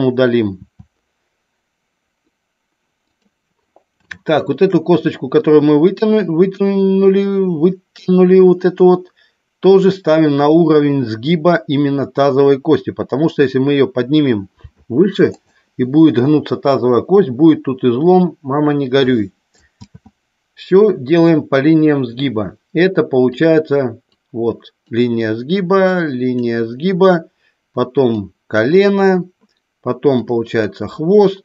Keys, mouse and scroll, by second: 0.5 e, 3.0 click, 4.0 shift+middle click, 14.6 g, 15.3 click, 19.6 ctrl+z, 23.3 click, 24.1 click, 25.8 click, 28.0 click, 30.1 click.